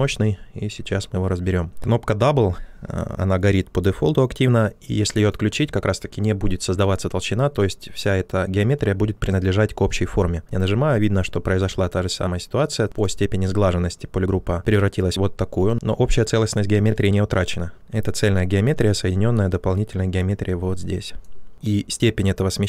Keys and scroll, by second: 21.5 ctrl+z.